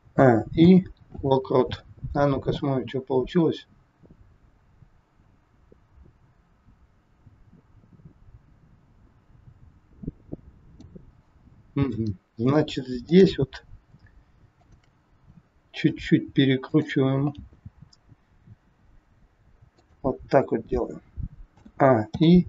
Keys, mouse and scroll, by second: 0.0 a, 0.6 i, 2.6 click, 11.9 middle click, 13.0 click, 14.5 shift+click, 15.8 r, 17.3 g, 21.5 a, 22.0 i.